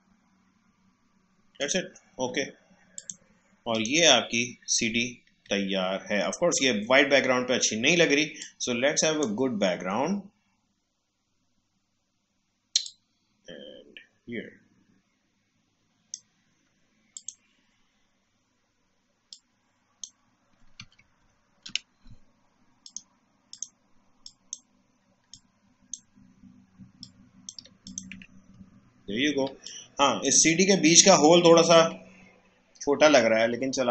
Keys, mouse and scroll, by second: 1.5 click, 5.6-6.1 alt+scroll up 1, 6.1-6.5 alt+scroll down 1, 8.3-11.6 drag, 12.8-21.2 drag, 21.2 ctrl+shift+[, 22.8-27.8 drag, 28.1 Tab, 28.7 alt+scroll up 1, 29.4 space, 29.6 click, 29.6 click, 30.0 space, 31.4 alt+scroll down 1, 32.0 alt+scroll up 1, 32.9 alt+scroll down 1.